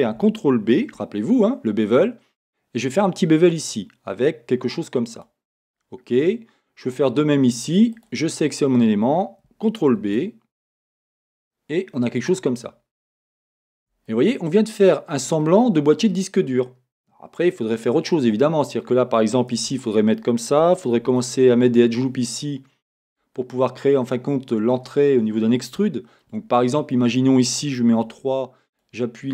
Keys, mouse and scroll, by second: 0.8 click, 0.9 ctrl+b, 5.2 click, 5.8-8.0 middle drag, 8.0 click, 10.0 ctrl+b, 12.3 click, 12.7 middle click, 13.8 Tab, 14.1 middle click, 18.5-19.4 scroll down 1, 19.6 Tab, 21.0 ctrl+r, 23.5 click, 24.0 middle click, 26.5-27.0 scroll up 1, 27.0 middle click, 28.1 3, 28.7 click.